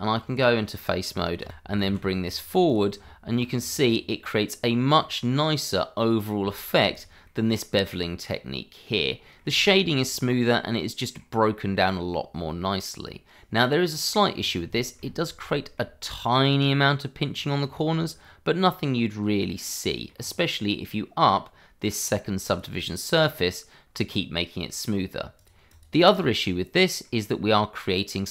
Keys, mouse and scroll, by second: 0.4 click, 0.8 middle click, 1.5 g, 1.6 y, 2.1 x, 2.9 click, 3.1 Tab, 3.8 click, 4.0 middle click, 4.7 scroll up 1, 5.1 middle click, 6.7 shift+middle click, 7.2 middle click, 9.2 shift+middle click, 9.5-10.0 scroll up 1, 10.0 click, 10.3 middle click, 11.5-11.9 scroll down 1, 11.9 middle click, 14.3 scroll up 1, 14.7 shift+middle click, 14.9 scroll up 1, 15.5 shift+middle click, 17.2 middle click, 17.2-17.6 scroll down 1, 18.2 middle click, 20.1-20.6 scroll up 1, 20.6 middle click, 22.4 click, 24.1-25.3 scroll down 1, 25.3 click, 25.7 double click, 26.4-26.7 scroll down 1, 26.7 middle click, 27.3-28.3 scroll up 1.